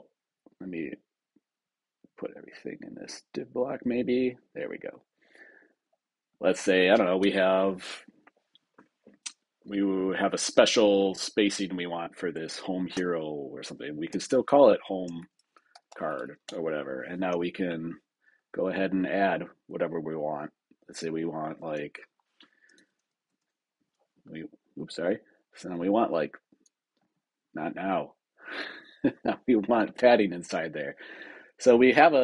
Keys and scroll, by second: 7.1 super+Return, 16.3 Return.